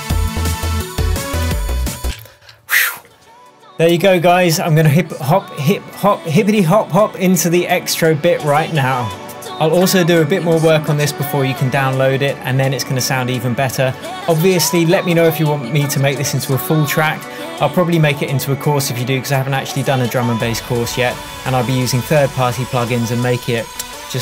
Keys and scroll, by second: 2.1 space.